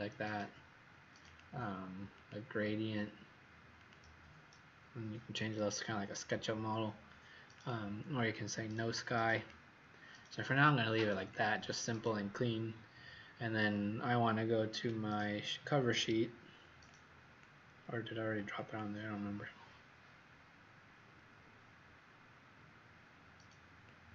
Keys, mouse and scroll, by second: 8.1 click, 9.3 click.